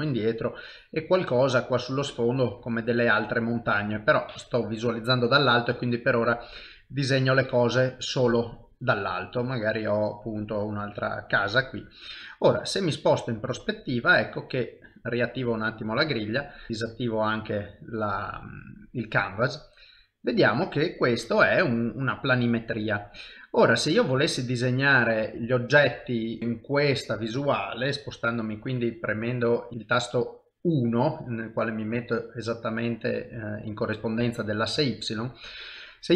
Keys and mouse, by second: 0.3 click, 3.2 shift+middle click, 5.6 click, 12.3 middle click, 14.1 ctrl+middle click, 15.5 click, 15.9 shift+middle click, 16.5 middle click, 17.9 click, 19.7 middle click, 20.5 ctrl+middle click, 21.3 middle click, 22.5 shift+middle click, 23.3 middle click, 28.5 KP_3, 29.7 KP_1.